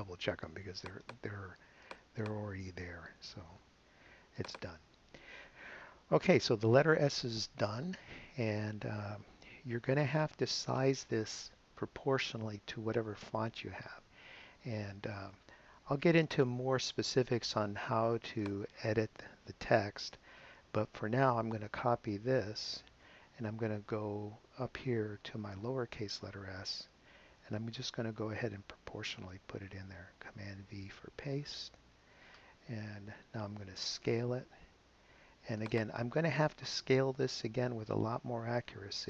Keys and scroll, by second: 3.5 super+z, 22.8 super+c, 31.7 super+v.